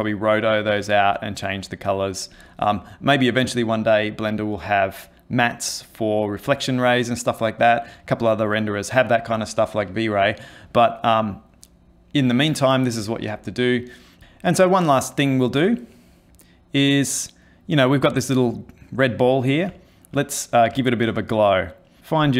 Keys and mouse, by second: 15.7 ctrl+middle click, 17.7 middle click, 19.4 middle click, 19.7 ctrl+middle click, 20.5 middle click, 20.8 middle click, 21.2 middle click, 21.6 middle click, 22.0 click.